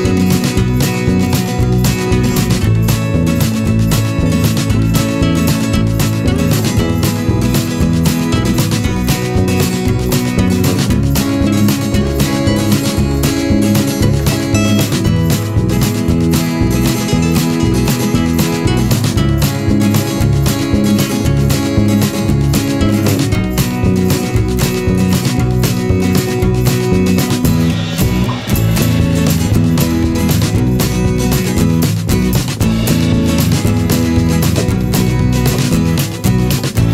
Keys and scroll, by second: 0.5 ctrl+z, 0.9 ctrl+z, 3.2 v, 24.3 Delete, 25.2 p, 30.3 ctrl+z, 31.2 v, 31.8 a.